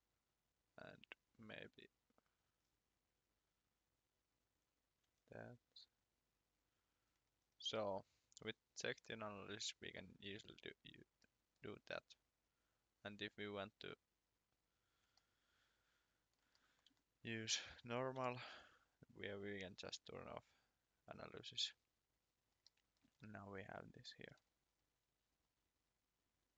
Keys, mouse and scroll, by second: 4.3 click, 5.0 1, 6.8 click, 7.1-7.7 scroll up 1, 7.7 shift+middle click, 11.2 middle click, 13.3 click, 14.8 scroll up 1, 15.2 shift+middle click, 16.5 middle click, 17.0 shift+middle click, 21.5 click, 22.7 shift+middle click, 23.1 scroll down 2, 24.1 shift+middle click, 24.3 shift+scroll up 2, 26.5 click.